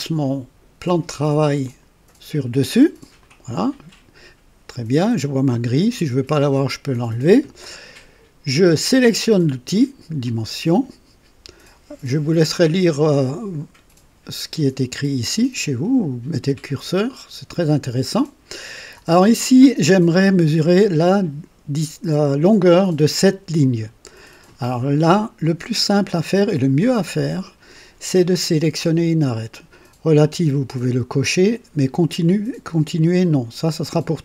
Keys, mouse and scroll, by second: 1.6 click, 3.1 click, 10.2 click.